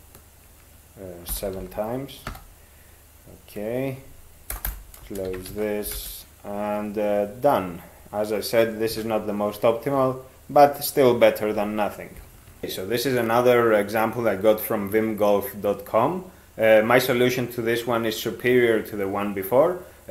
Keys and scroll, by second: 1.3 ctrl+7, 1.6 ctrl+x, 2.3 e, 4.5-6.0 typing, 5.5 ctrl+a.